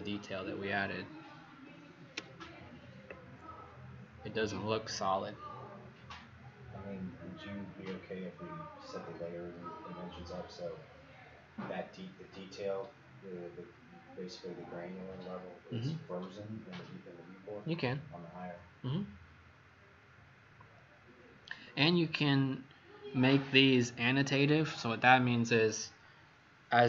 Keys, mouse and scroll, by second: 2.1 ctrl+0.